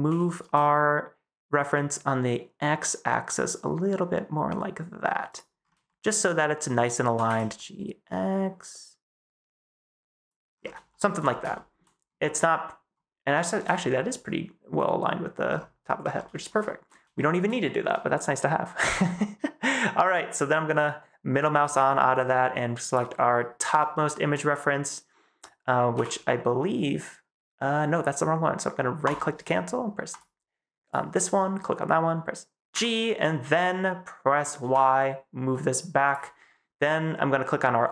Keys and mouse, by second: 0.0 g, 0.3 x, 5.8 shift+click, 5.8 shift+middle click, 6.0 shift+click, 6.9 g, 7.1 x, 10.0 click, 10.8 shift+middle click, 11.4 shift+middle click, 13.3 shift+middle click, 16.4 shift+middle click, 17.1 shift+middle click, 18.1 shift+middle click, 20.7 middle click, 22.8 middle click, 23.8 shift+middle drag, 24.4 middle drag, 25.8 g, 32.6 g, 34.5 y, 37.8 click.